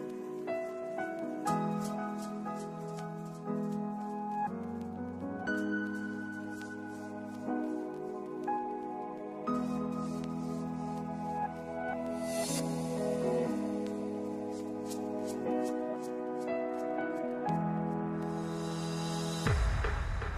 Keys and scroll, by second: 7.4 ctrl+space, 20.1 ctrl+s.